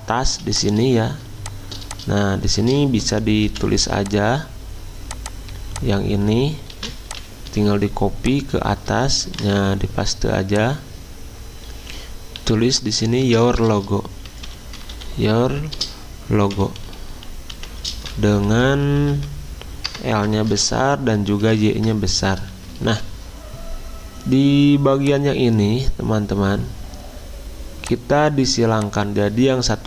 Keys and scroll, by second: 0.3 z, 3.5 v, 6.8 ctrl+c, 7.5 Escape, 9.2 ctrl+f, 13.2 ctrl+a, 14.0-15.5 typing, 16.5-19.9 typing, 21.0 ctrl+Left, 21.3 ctrl+Left, 21.5 ctrl+Left, 22.5 Delete.